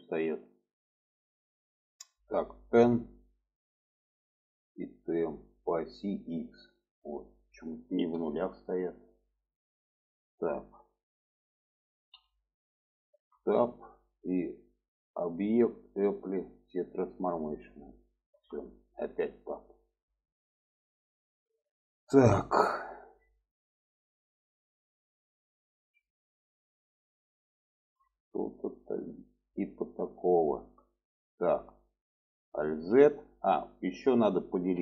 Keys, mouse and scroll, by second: 2.7 n, 4.7 click, 6.9-9.5 drag, 12.1 n, 13.1 Tab, 15.1-17.1 drag, 18.3 Tab, 19.8 shift+middle click, 23.4 middle click, 25.3 middle click, 25.8 alt+z, 26.0-28.2 middle drag, 28.7 shift+middle click, 29.3 shift+middle click, 30.4 shift+middle click, 31.2 shift+middle click, 32.6 alt+z.